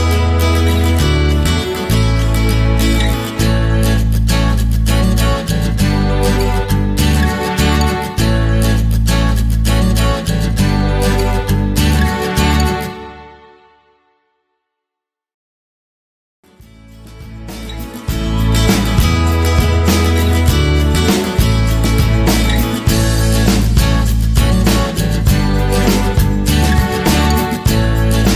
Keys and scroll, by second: 8.2 ctrl+=, 25.7 Left.